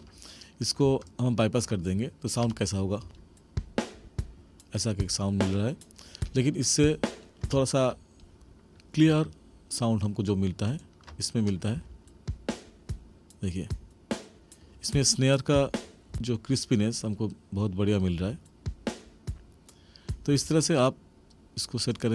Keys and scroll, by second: 3.0 space, 7.4 space, 11.7 space, 16.1 space, 18.1 space, 20.3 space.